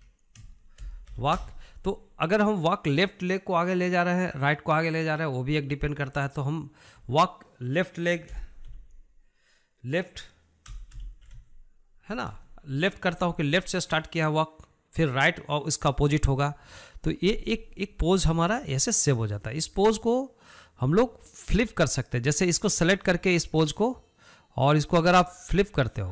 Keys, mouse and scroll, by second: 19.3-23.9 shift+middle drag, 23.9 click, 25.5 click.